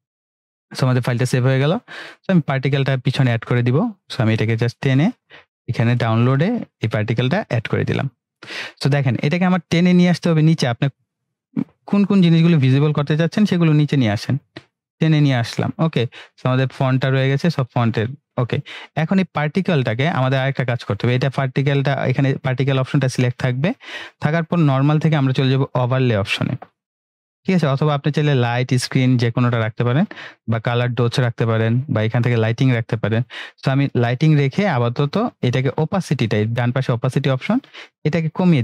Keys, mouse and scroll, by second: 13.5-14.4 scroll down 1, 14.4-15.3 drag, 15.8-16.7 scroll down 1, 16.7-18.0 drag, 21.8 click, 33.9-38.5 drag.